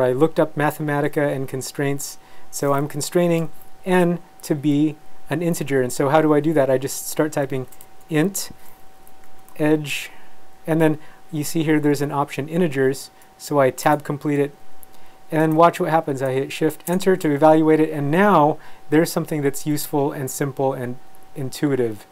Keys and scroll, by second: 7.2-9.5 typing, 13.9 Tab, 16.9 shift+Return.